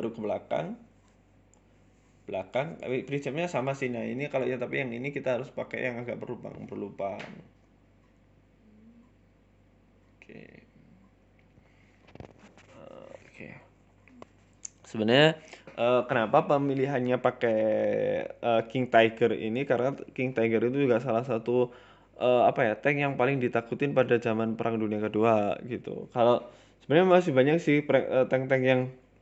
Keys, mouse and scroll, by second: 0.2 g, 1.2 e, 2.0 s, 3.0 g, 4.0 e, 4.2 s, 5.0 g, 6.2 e, 6.4 s, 7.1 KP_1, 7.8 scroll up 1, 8.1 middle click, 8.3-8.8 scroll down 2, 9.2 g, 10.4 g, 11.4 e, 12.9-13.6 scroll up 3, 13.1 shift+middle click, 13.6-20.1 typing, 21.2 g, 22.1 Tab, 22.2 scroll down 5, 22.4 middle click, 22.8-23.2 scroll up 3, 22.9 middle click, 23.2 KP_1, 23.6 scroll up 2, 23.8 shift+middle click, 24.0 Tab, 24.3 shift+middle click, 26.3 shift+middle click, 29.0 click.